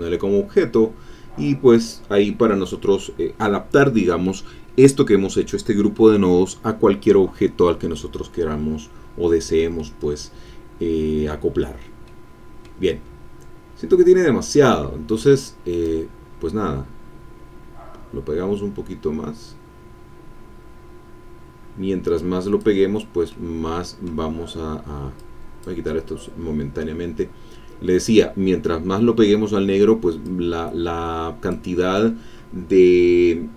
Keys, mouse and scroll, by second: 9.7-11.5 middle drag, 12.0 middle click, 12.7-13.5 scroll up 1, 15.8-23.0 drag, 23.3-24.6 middle drag, 25.1 click, 30.2-32.3 drag.